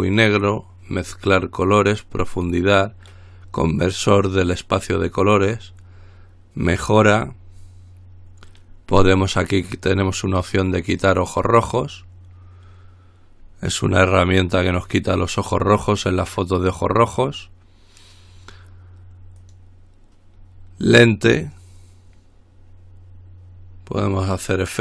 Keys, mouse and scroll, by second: 11.6 click, 19.6 click.